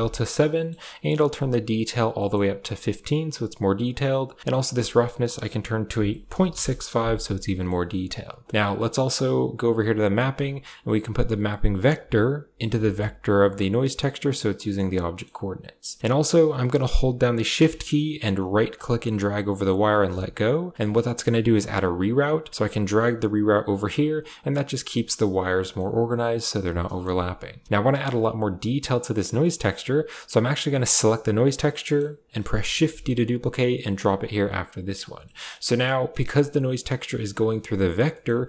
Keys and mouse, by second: 0.4 middle click, 1.3 click, 2.0 middle click, 4.3-6.4 drag, 7.4 middle click, 8.0 drag, 8.5 middle click, 8.8 middle click, 9.7 click, 11.6-13.8 drag, 14.5 middle click, 15.0 click, 15.7 click, 18.7-20.6 shift+drag, 21.2 g, 22.0 drag, 22.5 g, 24.6 g, 25.5 click, 26.7 click, 29.0 middle click, 30.8 click, 31.6 middle click, 32.6 shift+d, 34.1 click, 35.6 middle click, 35.9 click, 37.0 click, 37.9 click, 38.0 middle click.